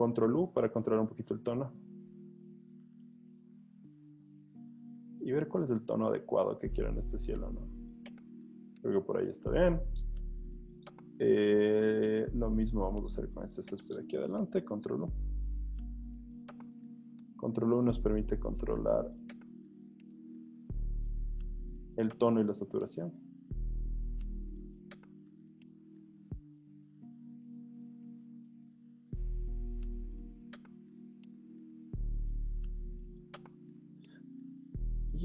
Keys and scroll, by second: 14.7 super+u, 32.6-33.4 typing, 34.7 v.